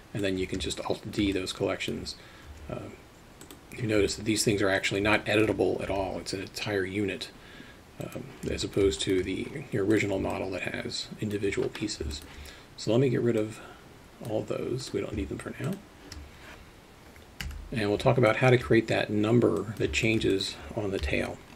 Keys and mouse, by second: 0.7-1.2 alt+shift+middle drag, 1.4-2.1 alt+middle drag, 4.1 alt+middle click, 5.2 alt+middle click, 5.9 g, 8.6 alt+middle click, 9.0 alt+shift+middle drag, 10.3-11.3 alt+middle drag, 12.2 alt+shift+middle drag, 13.4 click, 15.7 shift+click, 17.5 Delete, 18.3 alt+shift+middle drag, 19.6 click, 20.1 shift+middle click, 20.3 alt+middle click, 21.0 KP_3.